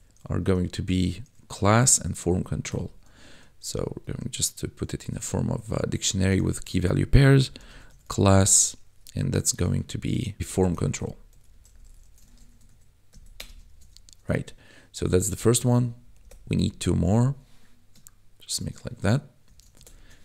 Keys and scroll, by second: 2.7 =, 3.6 shift+[, 7.4 c, 7.6 l, 7.6 a, 8.3 Right, 8.7 shift+;, 10.4-12.0 typing, 12.2 ctrl+s, 12.4 Right, 13.3 Return, 13.6 ctrl+s, 15.0 Up, 15.6 shift+Down, 16.5 Up, 19.4 Right.